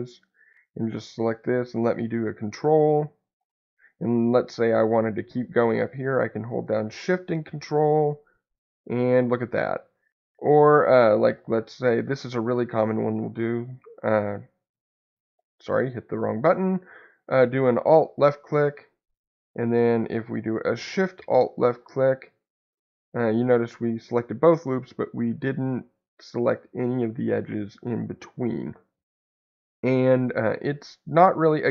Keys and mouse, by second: 0.1 click, 13.2 super+click, 16.7 alt+click, 21.6 alt+shift+click, 22.9 middle click, 31.1-31.7 middle drag.